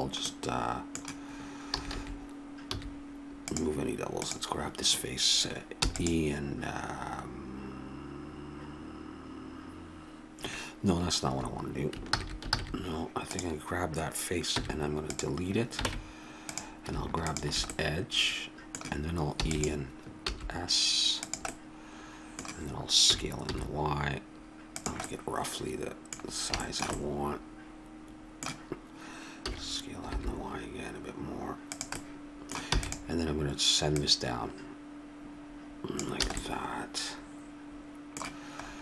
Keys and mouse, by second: 1.7 a, 1.9 a, 2.7 w, 4.2 right click, 5.8 e, 11.2 Escape, 12.0 ctrl+z, 12.5 ctrl+z, 14.6 x, 15.9 ctrl+Tab, 19.4 e, 20.3 s, 21.5-23.1 drag, 23.1 s, 29.4 s, 32.7 e, 33.9 click, 36.3 a.